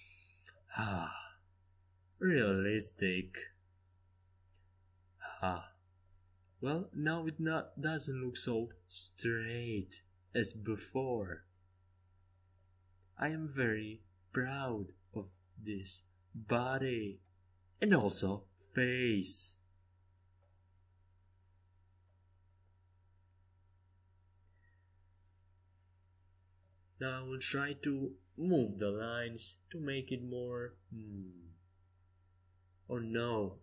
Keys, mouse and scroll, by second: 1.9-4.1 right drag, 2.9-4.7 drag, 4.7-5.9 middle drag, 10.5-13.3 middle drag, 14.1-18.1 middle drag, 17.5 KP_5, 17.9 KP_1, 18.4 KP_3, 23.0 z, 25.2 c, 28.5-32.1 middle drag, 32.1-33.6 drag, 32.8 c.